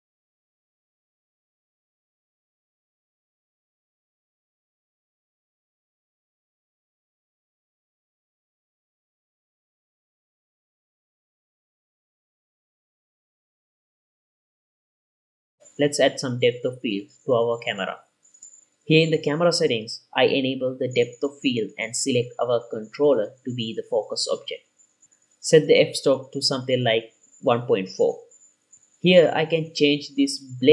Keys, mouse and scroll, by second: 0.9-2.6 drag, 2.9 click, 3.3 scroll up 2, 3.4 ctrl+s, 3.6 click, 4.1 scroll down 3, 4.2 ctrl+s, 5.0-8.6 drag, 8.6 scroll up 4, 9.2-10.2 drag, 10.2 scroll down 4, 10.3 scroll up 3, 10.9-13.5 drag, 13.5 scroll up 3, 14.0 ctrl+s, 14.0 scroll down 3, 14.4 click, 14.8 click, 15.2 scroll up 2, 15.5-17.3 middle drag, 18.2 click, 19.3-19.8 drag, 20.7 click, 21.6 click, 23.9 click, 26.8-29.0 drag.